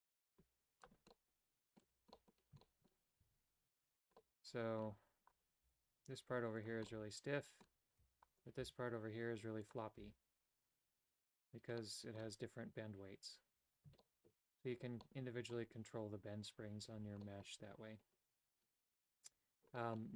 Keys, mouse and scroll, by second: 1.2 middle click, 2.2 middle click, 2.7 shift+middle click, 3.4 a, 4.2 middle click, 5.4 right click, 5.8 g, 7.0 middle click, 8.2 a, 8.7 g, 10.1 a, 11.8 middle click, 14.1 shift+middle click, 15.1 middle click, 17.3 middle click, 19.9 middle click.